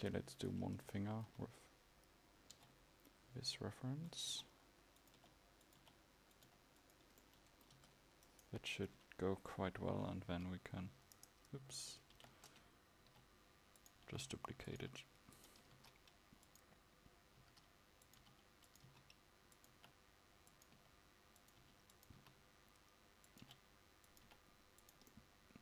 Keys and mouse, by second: 2.6 g, 7.8 Tab, 9.0 KP_1, 10.4 e, 12.2 ctrl+z, 13.1 g, 14.1 r.